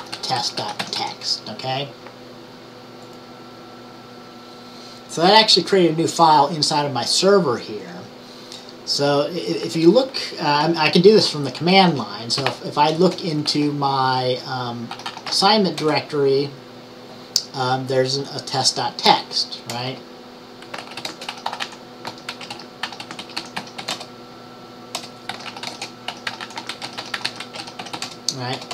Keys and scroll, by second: 0.0-1.5 typing, 12.3-15.4 typing, 20.5-24.4 typing, 27.3-28.5 typing.